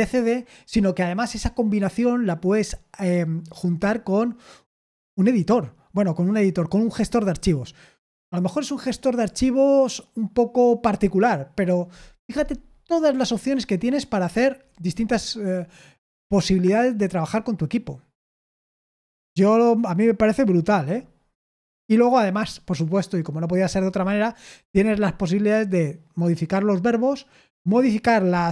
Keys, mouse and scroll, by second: 12.3-20.8 scroll down 2, 20.8-28.5 scroll down 1.